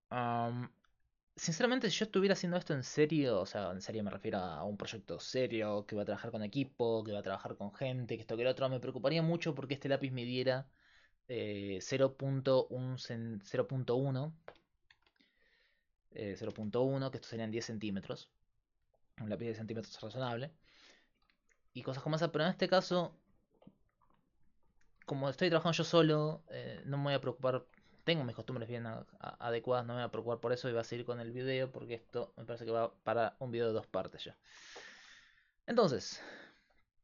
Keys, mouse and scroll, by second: 0.0-37.0 typing, 8.3-13.9 middle drag, 13.9-16.4 right drag, 22.3-24.9 middle drag, 27.2 right click, 28.1 click, 28.4 right click.